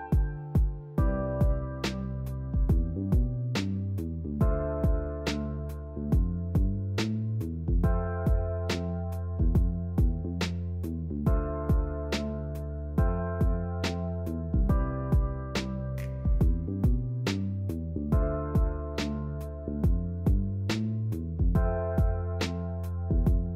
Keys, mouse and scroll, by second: 1.7 t, 2.4 r, 2.9 g, 4.4-4.9 scroll down 1, 4.9-6.0 shift+middle drag, 6.0 r, 6.9 e, 7.3 r, 7.8 g, 10.0 e, 12.0 s, 13.1 g, 14.8 drag, 15.2 g, 16.1 shift+click, 16.5 e, 17.8 click, 18.2 g, 20.3 ctrl+z, 20.7 s, 23.2 e.